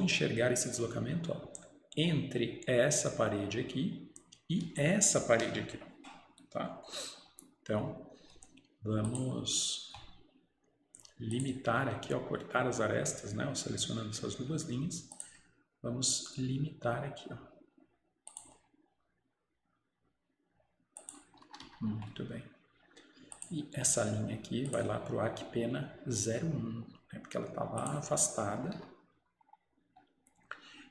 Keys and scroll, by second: 21.6 Escape, 21.7 Escape, 28.8 Escape.